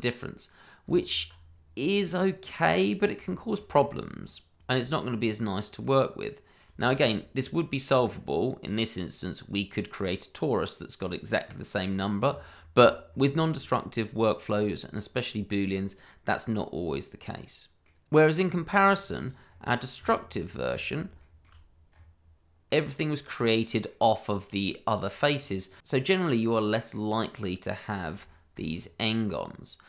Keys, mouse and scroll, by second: 0.8 Tab, 1.4-1.8 scroll down 1, 2.0 middle click, 2.5 scroll down 1, 2.8 shift+middle click, 3.2 scroll up 1, 3.8-4.8 scroll down 1, 4.8 Tab, 5.4 middle click, 5.7 scroll up 1, 6.4 middle click, 7.3 shift+middle click, 7.9 scroll down 1, 10.1 middle click, 12.3 Tab, 15.8-16.2 scroll down 1, 16.2 middle click, 18.0 Tab, 18.3 scroll down 1, 18.6 shift+middle click, 19.2 click, 19.4 scroll up 1, 20.0 Tab, 21.1 shift+middle click, 21.2 middle click, 21.3 shift+middle click, 21.9 scroll up 1, 22.6 middle click, 25.3-25.6 scroll down 1, 25.7 middle click, 29.0 shift+middle click, 29.1 scroll up 1, 29.3 middle click.